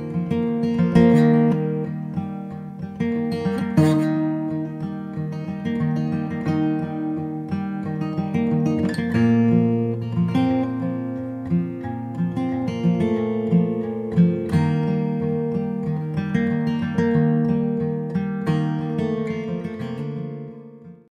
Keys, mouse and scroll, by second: 0.8 middle click, 1.6 e, 3.3-4.5 drag, 3.8 e, 4.5 ctrl+z, 5.4-6.7 drag, 6.7 e, 6.9 s, 8.0-10.8 middle drag, 10.9 e, 12.3 click, 12.6-15.0 right drag, 15.0 click, 15.0-16.1 middle drag, 15.6 click, 15.7 click, 16.1 click, 17.1 middle click, 18.1 middle click, 18.5 KP_0.